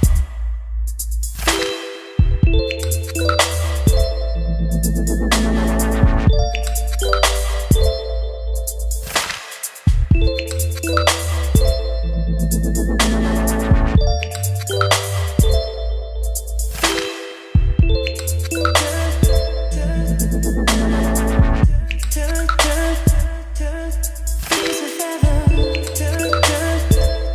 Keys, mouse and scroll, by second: 0.0-1.2 typing, 2.1-5.6 drag, 5.9 ctrl+s, 7.2-10.8 drag, 10.8-12.0 middle drag, 12.0-16.6 drag, 16.6-18.0 middle drag, 18.0 click, 18.6 Return, 19.7-25.7 typing, 20.6 Return, 27.0 click.